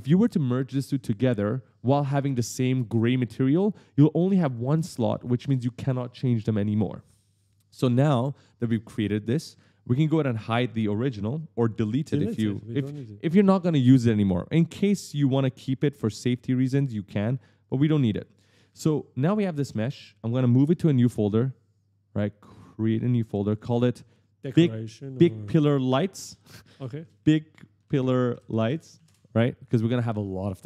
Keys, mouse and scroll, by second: 9.1 right click, 17.8-18.9 typing, 19.1 click, 20.6 right click, 22.6 click, 26.1-28.6 typing, 28.9 Return, 30.5 click.